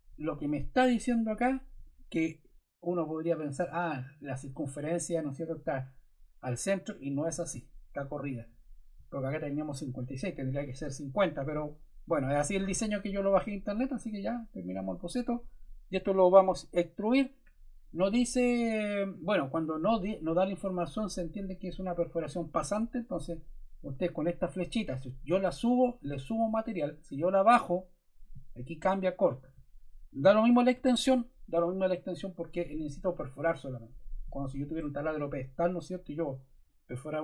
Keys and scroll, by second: 16.5 e.